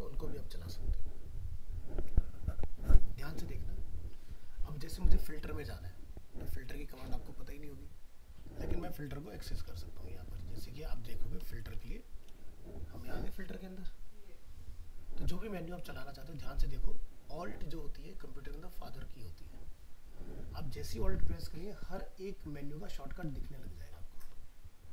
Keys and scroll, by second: 9.6 alt+f, 11.7 alt+t.